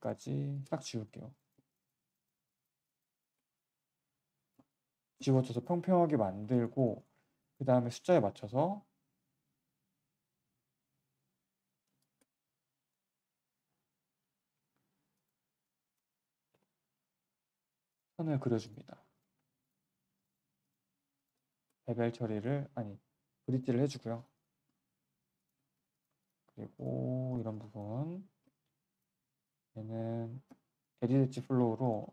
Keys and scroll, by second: 16.4 6, 18.5 q, 19.5 Delete, 31.6 g, 32.0 g.